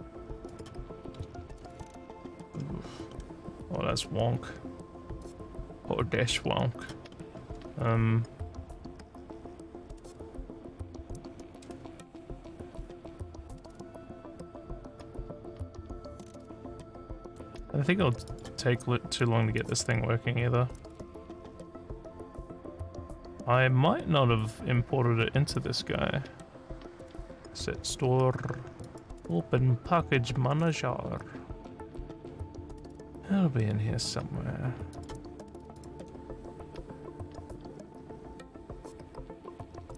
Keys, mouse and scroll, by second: 0.4 click, 1.1 f, 1.9 alt+scroll down 4, 2.5 alt+scroll up 2, 3.1 alt+middle click, 5.0 scroll up 1, 5.2-6.8 alt+drag, 7.1 alt+middle click, 13.9 scroll up 1, 18.2 click, 19.5 click, 27.2 click, 27.9 scroll up 1, 28.8 click, 32.1-32.4 scroll down 1, 34.0 scroll up 4, 34.9 click, 35.7 click.